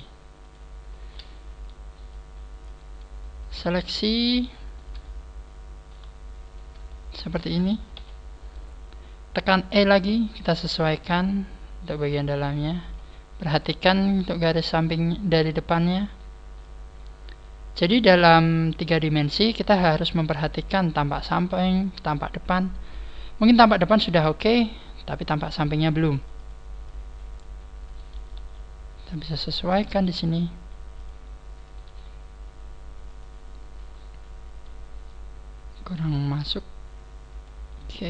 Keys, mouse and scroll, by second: 2.1 click, 3.6 shift+right click, 4.0 shift+right click, 4.2 shift+right click, 5.0 shift+right click, 5.0 middle click, 6.4 middle click, 6.4 shift+right click, 7.6 scroll down 2, 7.9 KP_3, 8.5 scroll up 1, 9.7 e, 13.4 click, 13.9 scroll up 2, 14.2 right click, 14.8 click, 16.0 right click, 16.6 click, 18.2 right click, 18.7 click, 21.2 right click, 21.8 click, 25.0 scroll up 1, 25.6 scroll up 2, 25.8 right click, 26.1 click, 26.4 click, 26.8 click, 27.8 right click, 28.3 g, 29.1 click, 29.6 right click, 29.8 g, 31.1 click, 31.6 right click, 35.4 scroll up 1, 36.0 right click, 36.0-36.6 scroll up 1, 36.6 click, 37.7 right click.